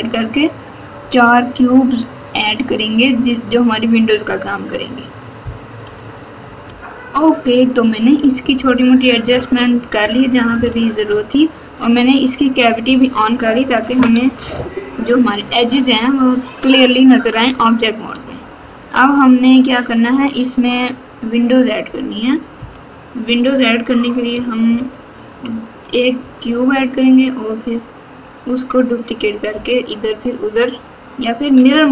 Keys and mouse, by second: 18.1 Tab, 19.7 click, 22.5 KP_1, 24.6-25.3 ctrl+KP_6, 26.4 Tab, 29.5 KP_4.